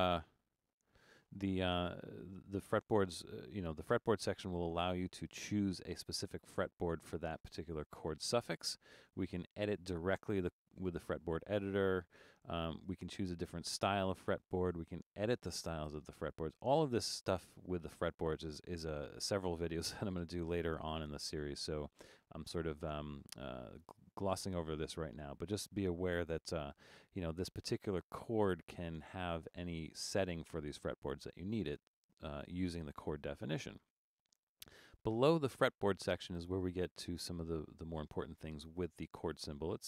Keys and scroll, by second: 0.7 Return.